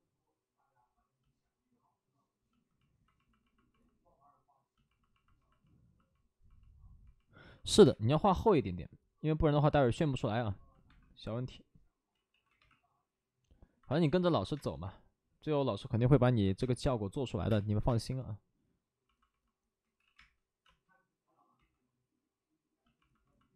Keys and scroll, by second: 7.7 3, 7.7 space, 8.1 3, 10.8 1, 12.1 ctrl+z, 12.5 ctrl+z, 12.5 2, 13.8 space, 17.2 space, 17.2 5, 17.4 space, 19.7 ctrl+z, 20.5 ctrl+z, 20.5 space, 21.5 ctrl+z.